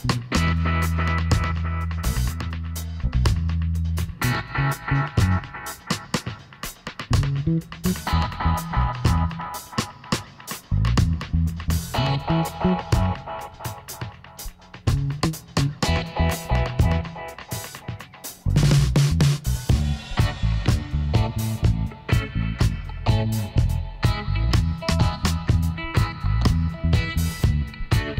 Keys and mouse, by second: 2.7 middle click, 3.6 Tab, 5.5 middle click, 6.7 Tab, 7.7 ctrl+r, 10.4-13.0 right drag, 12.0 x, 13.9 middle click, 14.1 Tab, 14.9 Tab, 17.1 ctrl+r, 20.3 click, 20.9 ctrl+r, 22.0 Tab, 22.2-23.6 drag, 23.6 a, 27.0-28.1 middle drag.